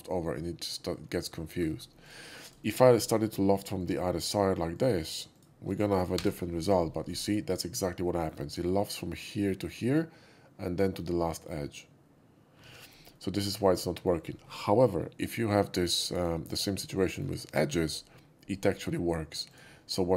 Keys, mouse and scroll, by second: 1.4 shift+middle click, 2.0 shift+click, 2.4 shift+click, 2.6 shift+right click, 2.8 shift+click, 3.7 shift+click, 4.7 shift+click, 5.3 shift+click, 6.1 l, 7.3-7.8 middle drag, 8.0 shift+middle drag, 12.6 ctrl+z, 13.1 ctrl+z, 13.1 middle click, 13.6 shift+middle click, 13.9 shift+middle click, 15.6 shift+middle click, 15.9 shift+middle click, 16.3 shift+middle click, 17.0 shift+middle click, 19.4 shift+click.